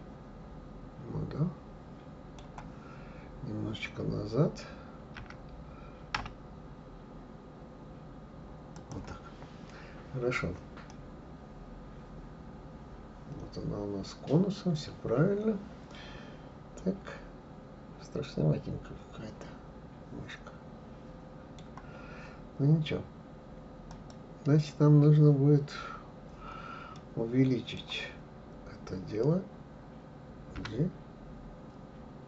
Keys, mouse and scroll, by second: 5.1 g, 9.8-10.9 scroll down 1, 10.9-13.9 middle drag, 23.9 click, 26.9-29.9 middle drag, 30.6 g.